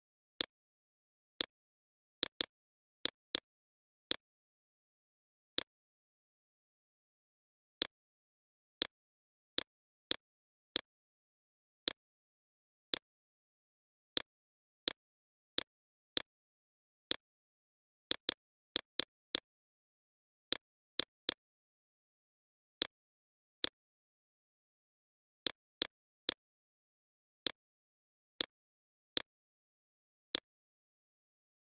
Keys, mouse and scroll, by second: 0.3 Left, 3.4 shift+click, 4.0 shift+Right, 5.4 click, 6.4 Left, 7.1 click, 7.6 Left, 7.8 Left, 7.9 Left, 9.3 click, 17.6 right click.